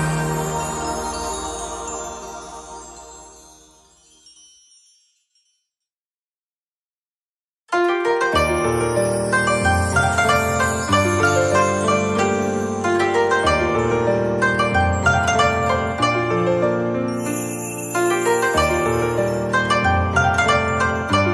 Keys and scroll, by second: 3.2 Delete, 14.1 z, 14.9 space.